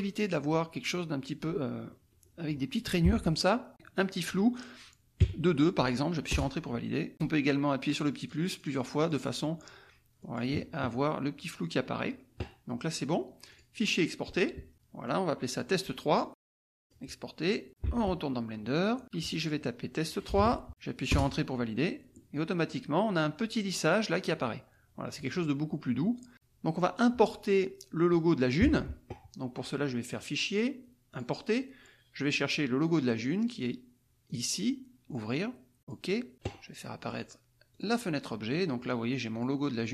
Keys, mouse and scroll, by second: 1.9 click, 3.0 alt+Tab, 3.7 click, 6.3 Return, 7.8-9.6 drag, 10.2 click, 13.4 click, 15.0 click, 16.8 click, 17.8 alt+Tab, 19.0-20.3 drag, 20.3 BackSpace, 20.3 KP_3, 21.1 Return, 25.1 scroll down 1, 25.3-28.6 drag, 28.6 alt+Tab, 30.0 click, 31.2 click, 34.2 click, 35.1 click, 35.8 click, 37.0 click, 37.7 click, 39.3 click.